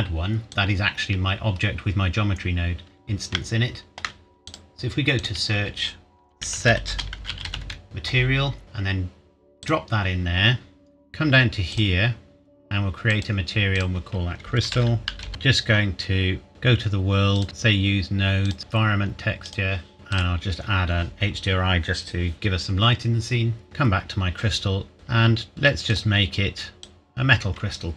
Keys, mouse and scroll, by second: 0.5 click, 3.3 shift+middle click, 3.9 shift+scroll up 1, 4.4 click, 6.3-7.5 typing, 8.6 click, 14.4-15.2 typing, 15.9 Return, 16.5 click, 23.6 click, 25.9 click.